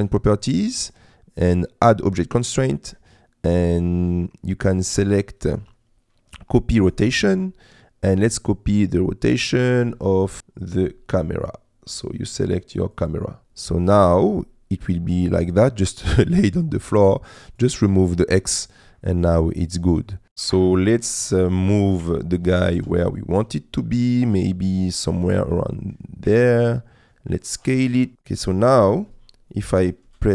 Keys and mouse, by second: 2.1-7.1 drag, 13.4 middle click, 14.2 middle click, 14.9 middle click, 17.5 click, 18.9 middle click, 20.0 middle click, 20.5 middle click, 22.1 g, 22.9 shift+z, 25.4 s, 27.7 g, 28.0 z, 28.5 click, 29.5 click, 30.0 space.